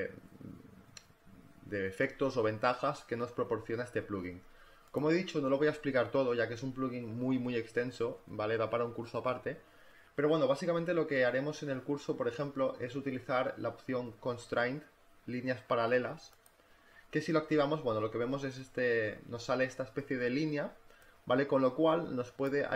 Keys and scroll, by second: 17.2 space.